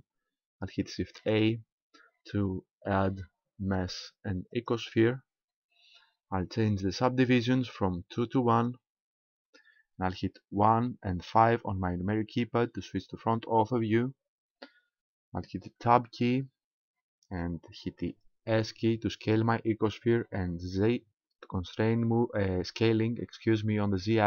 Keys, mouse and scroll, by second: 1.1 shift+a, 8.6 click, 10.7 KP_1, 11.6 KP_5, 13.5-15.2 scroll up 2, 15.8 Tab, 18.5 s.